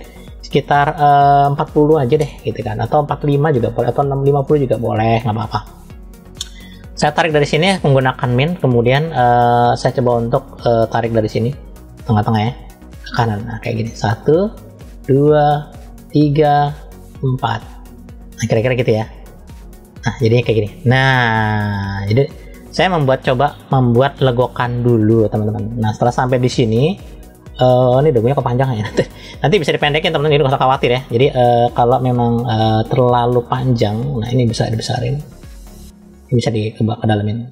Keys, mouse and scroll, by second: 0.5-2.1 drag, 2.9-4.7 drag, 12.5 click, 19.5-26.2 middle drag, 27.3 shift+middle click, 30.4 KP_3, 33.2 click, 34.5 f.